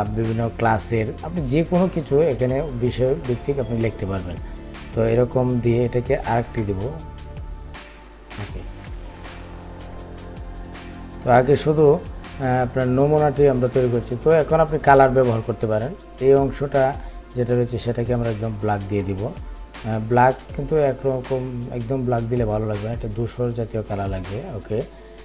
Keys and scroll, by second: 2.1 ctrl+c, 6.4 ctrl+f.